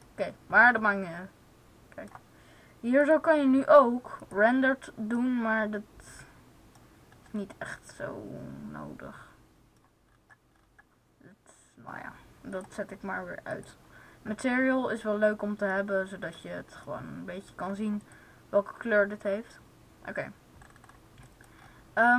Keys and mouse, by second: 2.9-4.9 drag, 10.4 middle click, 15.0-16.2 middle drag, 17.9-19.8 middle drag.